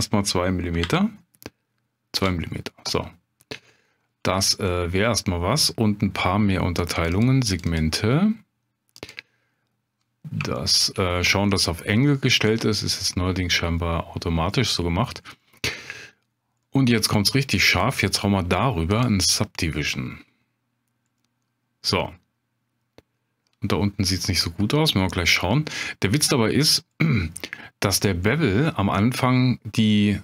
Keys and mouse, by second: 0.8 m, 3.5-3.9 middle drag, 4.7-5.1 middle drag, 7.0 click, 7.1 click, 7.5 click, 7.7 click, 9.1 click, 10.6-10.9 shift+drag, 13.0-13.8 middle drag, 15.4-15.9 middle drag, 16.7 middle click, 17.8-20.1 drag, 21.2-22.8 middle drag, 25.0 middle click, 27.1 middle drag, 28.3 middle click.